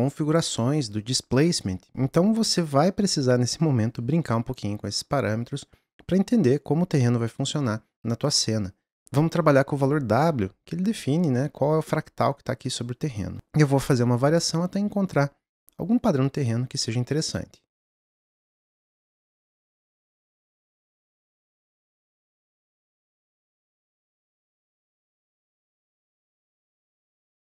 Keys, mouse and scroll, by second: 20.1 n, 20.5 click, 20.5 n, 20.7-27.4 ctrl+middle drag.